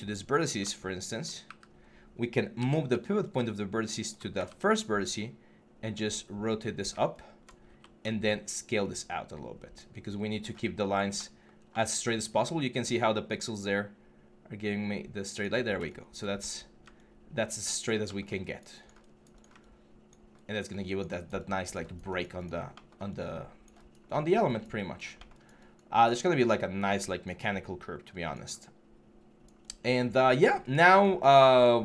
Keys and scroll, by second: 1.2 w, 2.4-4.4 typing, 16.2 6.